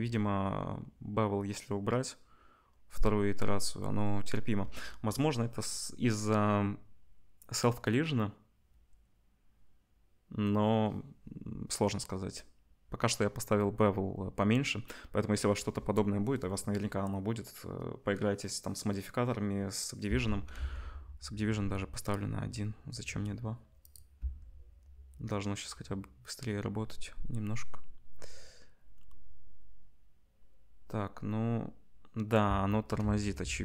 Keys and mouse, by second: 20.3-33.6 ctrl+drag, 20.3 space, 20.6 ctrl+s, 24.2 space, 32.6 space, 33.0 ctrl+s.